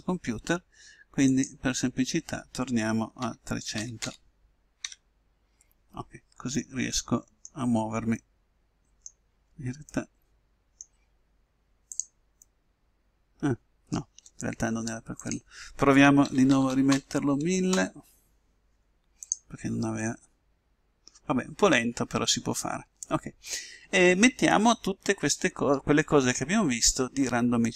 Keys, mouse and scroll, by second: 1.6-3.1 drag, 4.2 0, 12.5 middle click, 16.8 0, 20.4 click, 20.4 right click, 20.9 middle click.